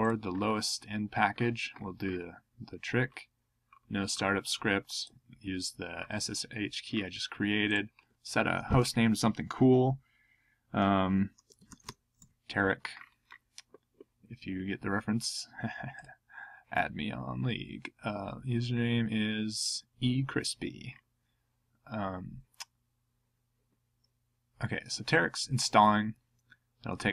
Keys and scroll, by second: 11.1-12.7 typing.